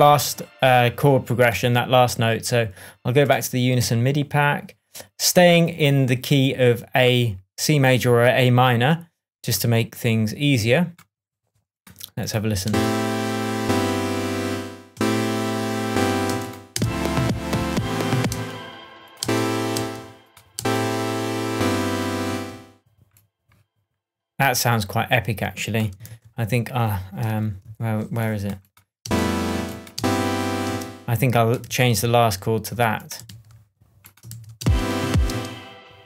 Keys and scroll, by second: 12.6 space, 14.4 space, 16.2 space, 18.2 space, 22.2 space, 26.0 super+z, 27.2 shift+super+z, 29.0 shift+super+space, 31.5 super+space, 31.5 super+c, 33.2 super+v, 34.5 super+space.